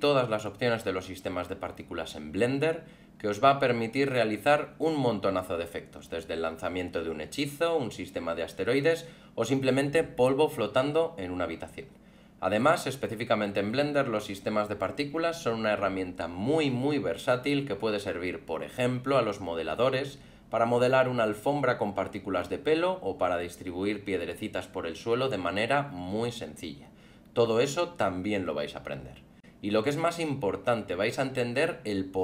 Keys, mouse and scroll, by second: 0.2 alt+middle click, 1.2 alt+middle click, 4.3 alt+a, 7.9 click, 8.4 scroll up 1, 14.5 alt+middle click, 17.7-18.0 scroll down 2, 18.8 alt+a, 19.1 alt+middle click, 19.5 scroll up 2, 21.0 click, 22.1 middle click, 22.3 alt+middle click, 22.7 scroll up 2, 23.0 f, 23.6 click, 23.7 middle click, 23.9 alt+middle click, 24.3 click, 24.5 click, 24.5 click, 24.7 click, 24.9 click, 25.3 click, 25.3 click, 25.5 click, 25.6 click, 25.7 middle click, 25.8 scroll up 4, 26.1 middle click, 26.3 alt+middle click, 27.8 middle click, 28.1 scroll down 3, 28.2 alt+middle click, 28.7 middle click, 29.0 scroll down 1, 29.1 alt+middle click, 29.7 click, 30.1 click, 30.2 click, 30.3 click, 30.4 click, 30.6 click, 30.7 click, 30.7 click, 31.0 alt+middle click, 31.9 middle click, 32.1 alt+middle click.